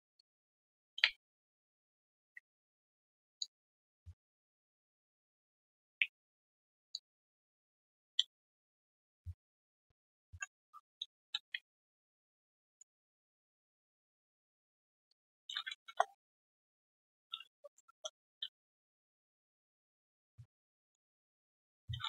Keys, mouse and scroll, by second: 0.1 ctrl+shift+click, 1.2 ctrl+shift+click, 2.3 ctrl+Delete, 3.4 alt+click, 4.4 ctrl+shift+click, 6.0 ctrl+Delete, 6.9 alt+click, 7.8 alt+middle click, 12.0 shift+click, 14.1 shift+click, 15.0 alt+click, 15.8 alt+click, 17.8 Return, 18.6 Return, 18.7 alt+click, 19.6 alt+click.